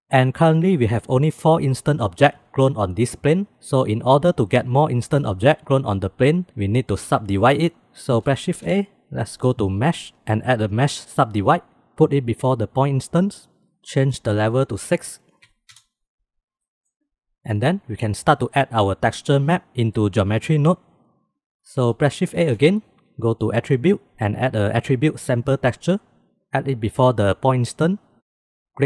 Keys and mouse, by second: 8.5 shift+a, 14.5-16.2 middle drag, 16.6-17.1 middle drag, 22.3 shift+a.